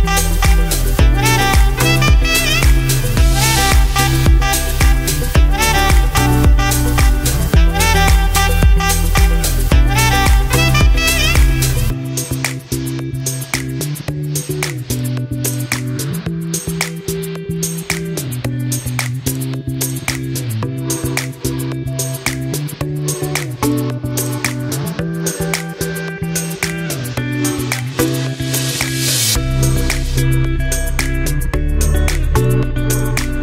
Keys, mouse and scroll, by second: 6.4 scroll down 1, 7.1 click, 7.6 scroll up 1, 10.2-11.2 scroll up 1, 11.2-14.6 drag, 14.6 right click, 15.2-15.8 scroll up 1, 16.5 scroll down 1, 18.0 click, 18.6 scroll down 1, 19.5-21.0 drag, 21.0 ctrl+g, 21.8-23.8 drag, 28.0 click.